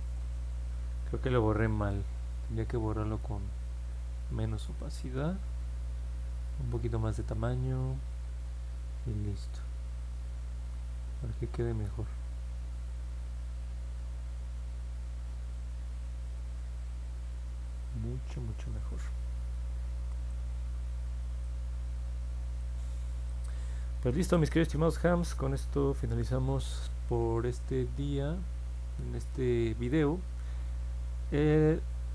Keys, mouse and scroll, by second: 0.1 middle click, 0.6 middle click, 1.0 ctrl+z, 3.6 click, 8.9-12.7 drag, 12.9 click, 13.3 click, 13.7 click, 14.0 click, 14.3 click, 14.7 click, 15.0 click, 15.4 click, 15.7 click, 16.4 click, 16.7 click, 17.1 click, 17.4 click, 17.7 click, 17.9 click, 18.5 click, 19.4 middle click, 19.7 middle click, 20.2-21.4 alt+drag, 22.5 alt+click, 23.6 alt+middle click, 24.6 scroll down 1, 25.2 scroll down 1, 25.7 middle click.